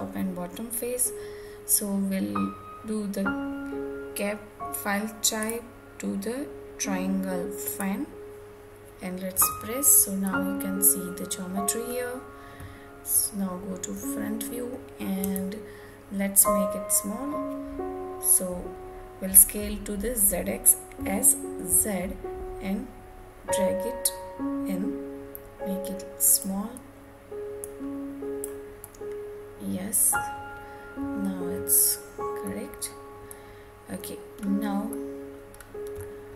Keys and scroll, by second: 8.9 Tab, 14.8 Tab.